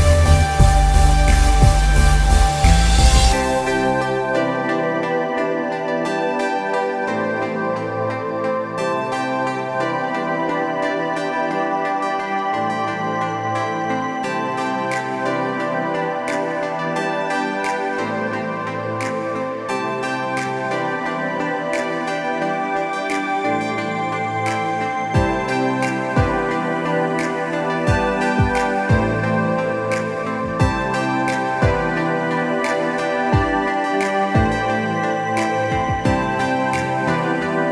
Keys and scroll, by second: 6.2 space, 12.9 space, 14.9 space, 16.2 v, 16.7 space, 20.4 ctrl+alt+z, 22.9 ctrl+alt+z, 23.0 ctrl+alt+z, 37.2 b.